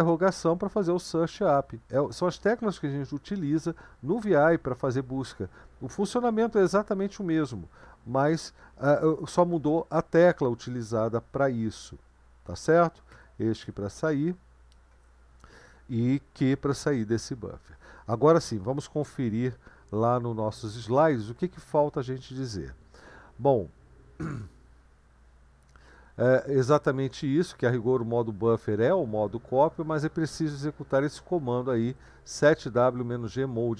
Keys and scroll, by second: 16.5 q, 20.9 super+1.